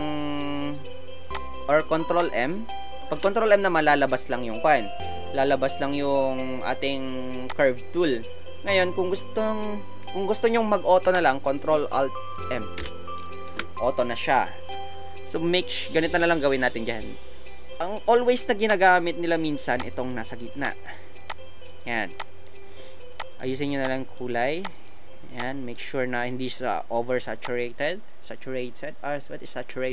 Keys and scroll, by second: 3.1 ctrl+m, 12.7 ctrl+alt+m.